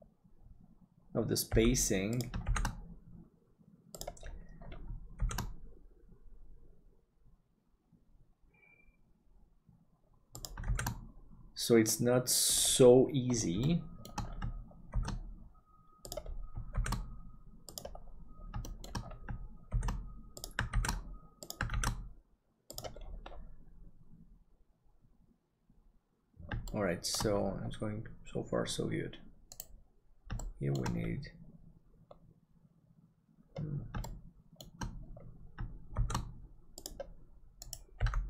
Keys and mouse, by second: 1.5 g, 2.4 shift+d, 10.6 shift+d, 13.7 shift+middle click, 14.9 shift+d, 18.6 middle click, 19.8 shift+d, 26.7 shift+middle click, 29.6 right click, 30.4 shift+middle click, 34.0 shift+middle click, 35.9 shift+d, 38.0 g.